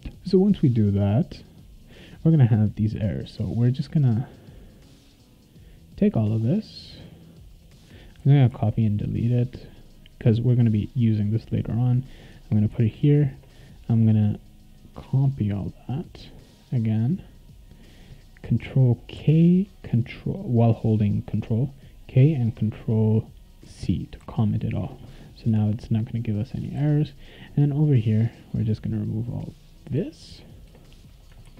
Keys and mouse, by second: 0.5 click, 4.2-7.7 drag, 8.2 ctrl+c, 8.5 ctrl+x, 11.6 click, 12.7 ctrl+v, 14.8-17.8 drag, 19.2 ctrl+k, 23.6 ctrl+c, 24.2 ctrl+s, 25.2 click, 25.4 Return, 26.5 click, 26.8 ctrl+s, 28.1 click, 28.9-29.9 drag, 29.9 BackSpace, 30.3 BackSpace, 30.6 BackSpace, 31.4 ctrl+s.